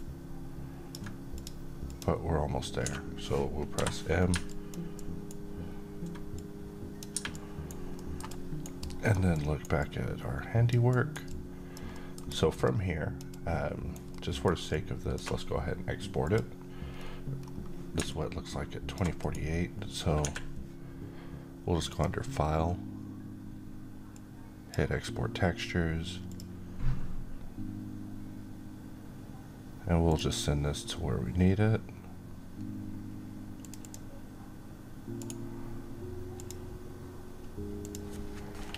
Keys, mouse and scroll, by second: 2.7-3.6 typing, 4.4 click, 4.8-5.5 alt+right drag, 6.2-6.8 click, 7.2-7.8 right click, 7.8 alt+middle click, 8.2-9.5 alt+right click, 8.7 alt+click, 9.2 alt+right click, 9.7-10.6 alt+click, 10.8 alt+right click, 11.2-11.8 alt+click, 11.8 alt+middle click, 12.2 alt+right click, 12.5-13.1 alt+click, 13.2-13.8 alt+right click, 14.0-15.2 alt+middle click, 14.6-16.1 alt+drag, 16.9 scroll down 1, 17.3-17.9 scroll up 1, 17.9 alt+click, 18.0-18.9 alt+click, 19.1 right click, 20.1 Escape, 21.8-24.6 drag, 30.0 click, 33.5 click, 35.1 right click, 36.2 click.